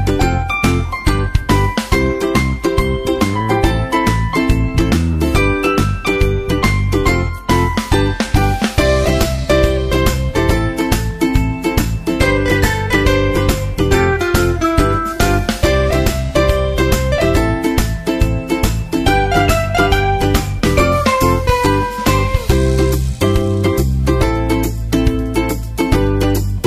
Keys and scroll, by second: 11.2 super+Right, 16.7 super+Right.